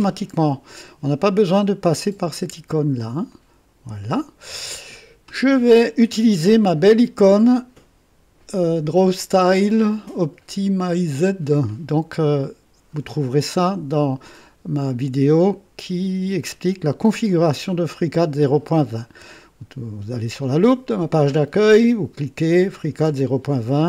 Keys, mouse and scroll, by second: 3.3 click.